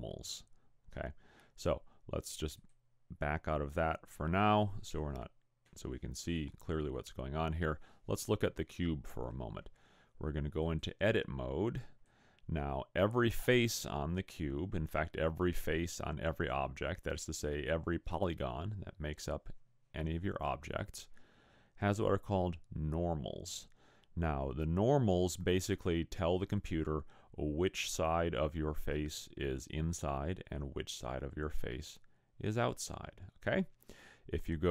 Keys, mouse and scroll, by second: 2.6 click, 10.6 click, 31.0 click.